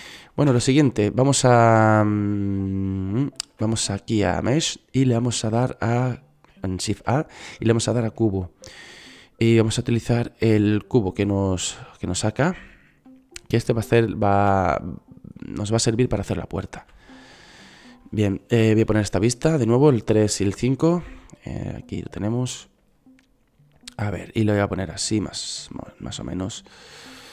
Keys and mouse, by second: 0.6 shift+a, 3.7 shift+a, 14.7 s, 15.7-19.1 drag, 17.2 s, 19.1 KP_3, 20.8 KP_5, 24.0 middle click.